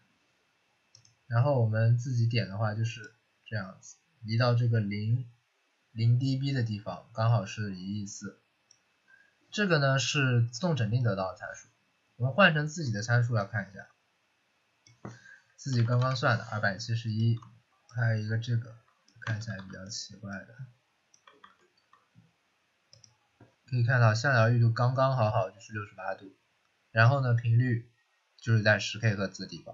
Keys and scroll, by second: 15.4-16.4 typing, 19.3 ctrl+c, 19.5 ctrl+c, 21.3 ctrl+v.